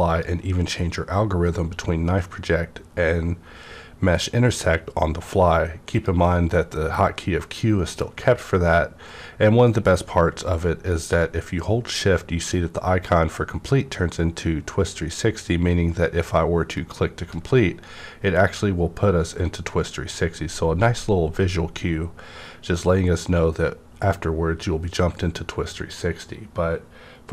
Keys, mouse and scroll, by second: 0.1 click, 0.1-2.2 scroll up 1, 5.9 click, 11.1 shift+Num_Lock, 11.1 click.